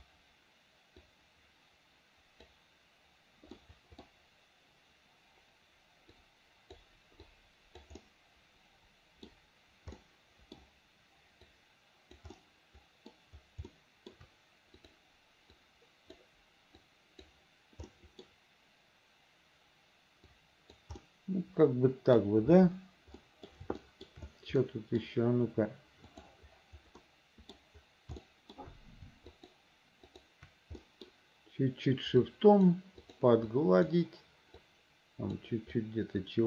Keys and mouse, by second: 1.2-2.6 drag, 3.7 middle click, 6.3 click, 7.4 click, 8.1-9.4 middle drag, 10.1 middle click, 11.6 click, 12.5 middle click, 13.8 shift+middle click, 15.0 click, 15.7 click, 16.9 click, 18.0 middle click, 20.4 right click, 21.1-22.3 middle drag, 23.3 middle click, 23.9 shift+middle click, 24.7 middle click, 27.1 middle click, 28.3 shift+middle click, 29.5 shift+middle click, 30.2 shift+middle click, 30.9 middle click, 32.4 click, 33.1 click, 33.6 click, 34.7 click, 35.9 click.